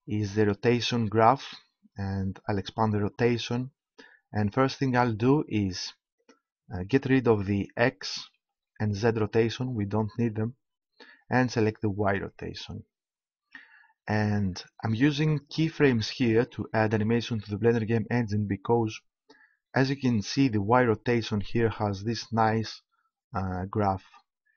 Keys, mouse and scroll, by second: 6.2-7.9 drag, 8.3 x, 9.0-10.8 drag, 10.1 x, 12.0-13.8 drag.